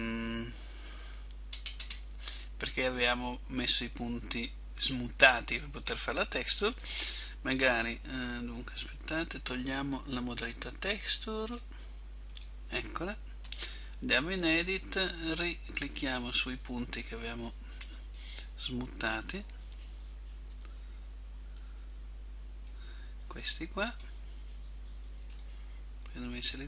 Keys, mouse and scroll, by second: 1.6-2.0 scroll up 4, 2.4 middle click, 9.0 Tab, 12.4 click, 13.6 Tab, 20.7 a, 25.4 middle click.